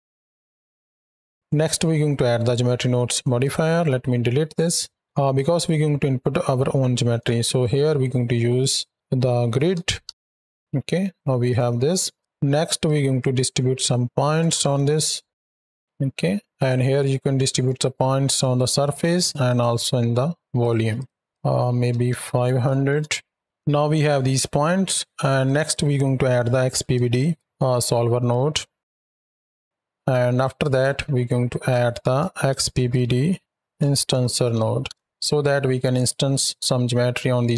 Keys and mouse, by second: 1.1 drag, 2.4-2.9 drag, 3.3 click, 3.7 x, 4.5-5.0 drag, 7.5 shift+a, 10.5 Down, 11.4-12.0 drag, 12.7-13.0 drag, 15.6 Down, 16.5-18.9 drag, 19.3 click, 20.5 click, 20.8 click, 21.3-22.8 drag, 22.3 KP_0, 24.1 middle click, 25.3 drag, 29.3 click, 30.3-30.6 drag, 31.3 drag, 35.8 click, 37.3 click.